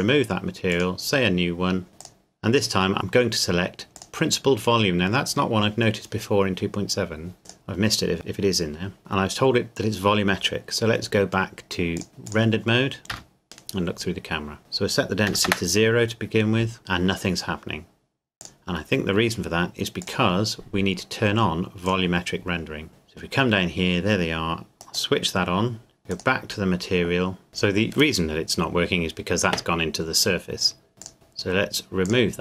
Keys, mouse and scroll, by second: 2.0 click, 3.9 click, 7.4 click, 11.9 click, 13.1 click, 14.6 click, 15.3 KP_0, 15.5 KP_Enter, 18.4 click, 26.1 click, 31.0 click.